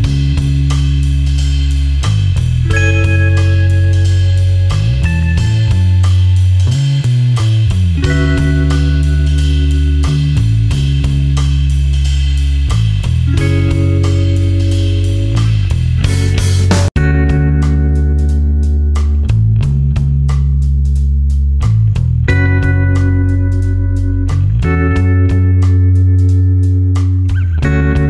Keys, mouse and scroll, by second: 0.2 alt+click, 4.0 Delete, 5.1 space, 5.4 click, 5.7 space, 6.2 click, 7.7 Delete, 8.9 ctrl+z, 9.4 click, 11.3 Delete, 11.9 space, 12.2 click, 12.5 space, 13.4 click, 14.4 Delete, 15.0 space, 15.5 click, 15.6 space, 16.8 click, 18.0 Delete, 18.8 click, 19.8 Delete, 20.4 space, 20.6 click, 21.0 space, 21.7 click, 24.1 Delete, 24.8 click, 25.4 Delete, 26.2 space, 26.4 click, 26.8 space, 27.2 click, 27.9 Delete.